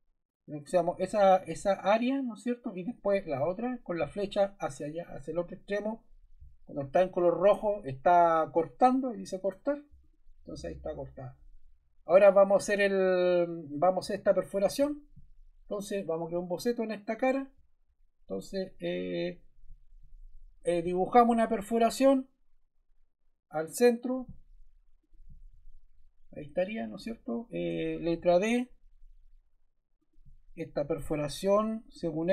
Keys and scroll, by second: 27.6 Escape, 28.1 d.